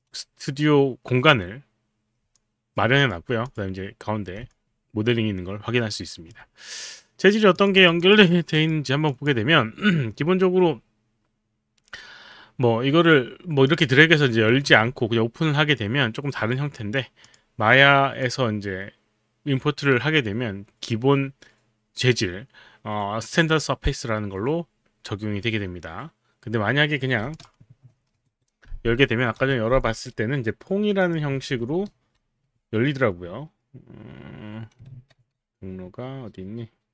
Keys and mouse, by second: 2.3 alt+click, 3.0 click, 3.4 click, 4.5 alt+click, 7.6 click, 7.8 click, 8.9 click, 9.1 click, 13.7 click, 14.7 alt+Tab, 17.3 click, 18.3 click, 27.4 click, 28.1 ctrl+n, 29.6 n, 31.0 click.